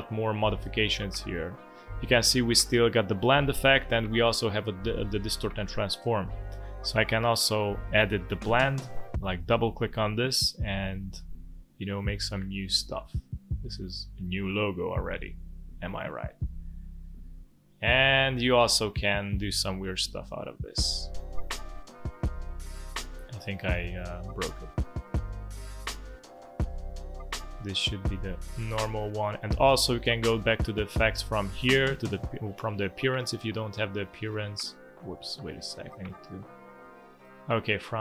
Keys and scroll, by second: 35.1 Escape.